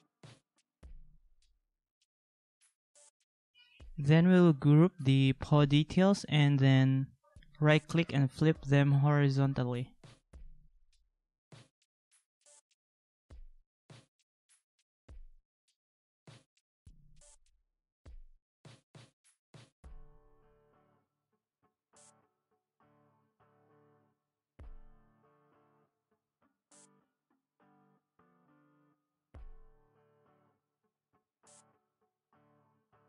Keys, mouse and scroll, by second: 4.8 ctrl+z, 11.3 ctrl+=, 13.2 ctrl+g, 16.3 ctrl+-, 19.9 ctrl+z, 20.4 ctrl+x, 20.7 ctrl+z, 30.8 ctrl+x, 31.3 ctrl+x, 32.3 ctrl+=.